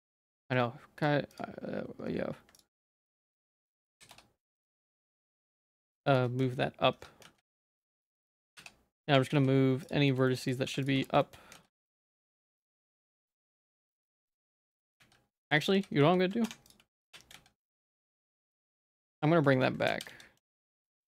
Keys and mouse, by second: 0.4 z, 2.6 click, 3.0 middle click, 3.4 middle click, 3.5 middle click, 3.9 g, 6.4 z, 7.0 1, 7.2 z, 8.1 shift+middle click, 8.4 g, 9.1 Tab, 9.3 z, 9.9 shift+click, 10.1 shift+middle click, 10.3 middle click, 10.7 ctrl+s, 11.0 Tab, 11.2 shift+middle click, 11.5 z, 11.8 middle click, 12.9 middle click, 13.1 ctrl+z, 13.4 ctrl+z, 13.8 ctrl+z, 14.2 ctrl+z, 15.0 z, 15.3 middle click, 15.5 ctrl+z, 15.7 ctrl+z, 16.0 ctrl+z, 16.5 Tab, 16.7 click, 17.0 h, 17.6 middle click, 17.6 z, 18.4 middle click, 18.8 ctrl+z, 18.9 ctrl+z, 19.2 ctrl+z, 19.9 ctrl+z, 20.1 ctrl+z, 20.7 ctrl+z, 21.0 Tab.